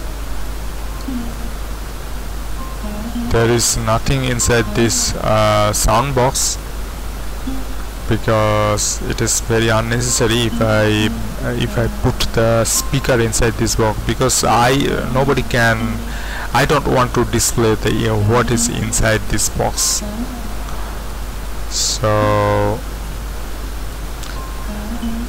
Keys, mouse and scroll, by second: 1.0 z, 1.6 g, 6.4 Escape, 9.8 Tab, 19.0-19.7 scroll up 1, 19.7 Tab, 19.7-20.2 scroll up 1, 22.5-23.1 scroll up 1, 23.1-23.9 scroll up 1, 23.9 Tab, 23.9-25.2 shift+middle drag.